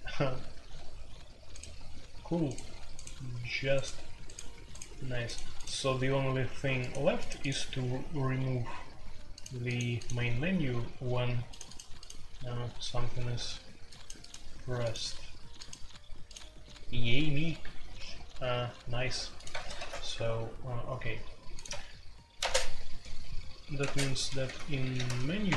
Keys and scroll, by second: 19.7 shift+c, 21.6 Escape, 22.4 space, 22.4 Tab, 23.8-25.0 typing, 25.4 Return.